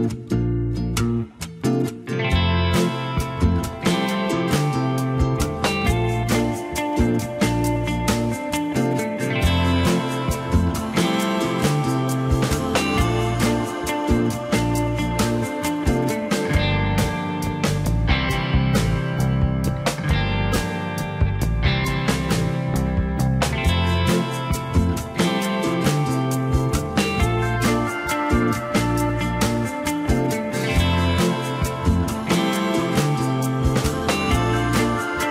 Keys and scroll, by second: 6.8 p, 20.4 ctrl+s, 26.6 3, 29.5 alt+z.